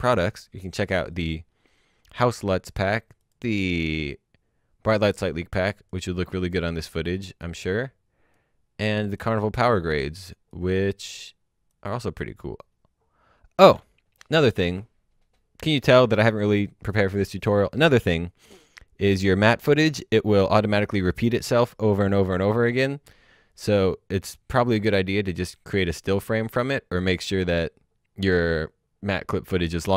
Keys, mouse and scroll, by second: 11.8 click, 23.3-24.8 scroll up 1, 25.2-26.6 scroll down 1, 26.6-27.3 scroll up 1.